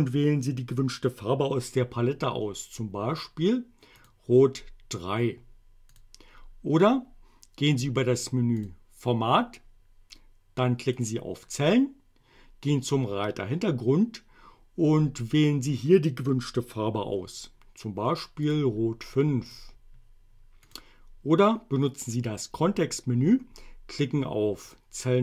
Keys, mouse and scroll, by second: 4.0 click, 6.0 click, 8.6 click, 11.0 click, 18.5 click, 19.5 click, 20.7 click, 21.9 right click, 24.7 click.